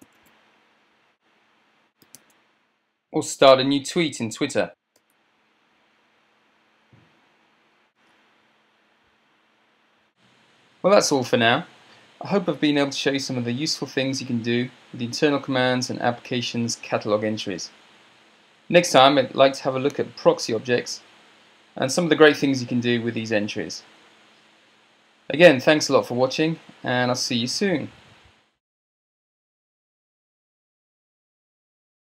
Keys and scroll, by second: 0.0 ctrl+alt+super+space, 2.1-4.6 typing, 3.2 Right, 5.1 Return, 5.6 Return, 7.9 ctrl+7, 8.2 ctrl+7.